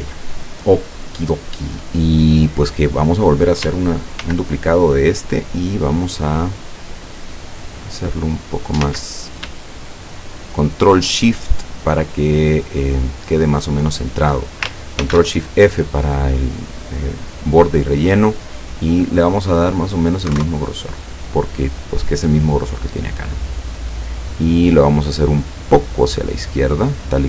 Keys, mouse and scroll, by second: 4.3 ctrl+d, 7.6-8.9 ctrl+drag, 8.9 ctrl+z, 10.2-14.3 ctrl+shift+drag, 15.1 ctrl+shift+f, 18.7 click, 20.4 KP_Enter, 22.1 click, 24.9-27.2 drag.